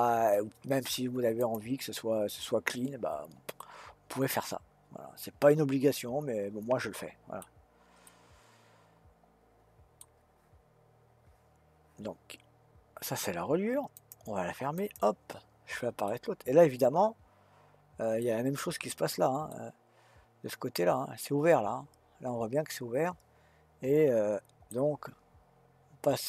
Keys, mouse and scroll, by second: 1.4 click, 3.5-6.6 middle drag, 7.4-8.1 scroll down 1, 8.1-11.1 middle drag, 13.9 click, 14.8 click, 16.1-18.6 middle drag, 18.6-19.5 scroll up 3, 19.5-22.5 middle drag.